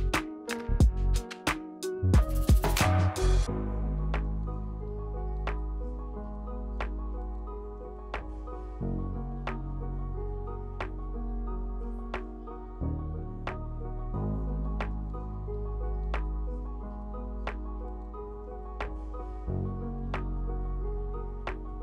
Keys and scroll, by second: 0.4 Return, 2.1 w, 4.8 d, 10.5 Tab, 12.0 e, 16.5 r, 19.1 w, 21.5 r.